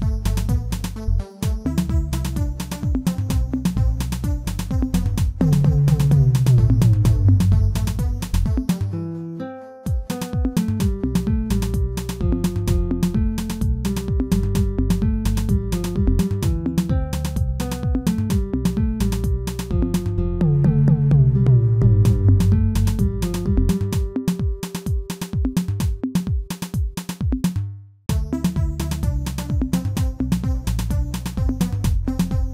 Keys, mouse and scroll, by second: 0.2 middle click, 1.0 scroll up 1, 1.9 scroll up 1, 2.8 alt+click, 3.5 scroll up 1, 4.5 alt+shift+click, 5.5 alt+shift+click, 7.0 alt+shift+click, 8.3 alt+shift+click, 9.5 ctrl+z, 10.5 alt+shift+click, 10.9 x, 13.7 alt+click, 14.4 s, 17.2 alt+click, 17.7 s, 20.7 x, 22.2 alt+click, 23.0 s, 24.8 Tab, 25.4 Tab, 25.8 alt+click, 26.8 alt+click, 27.6 s, 29.1 Tab, 29.3 scroll down 2, 29.6-32.5 middle drag.